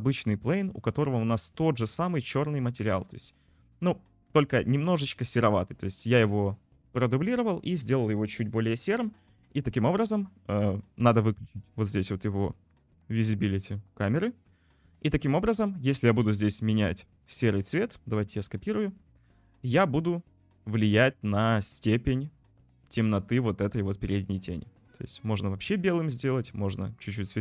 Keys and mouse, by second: 0.3 middle click, 0.5 click, 1.4 click, 2.9 click, 3.7-4.3 drag, 14.1 click, 15.5 click.